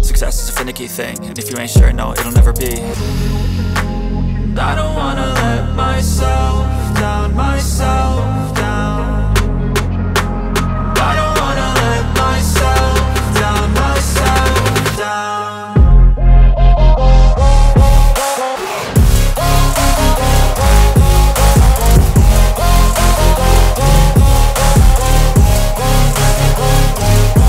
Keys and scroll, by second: 3.8 space, 15.3 shift+Page_Down, 16.5 ctrl+z.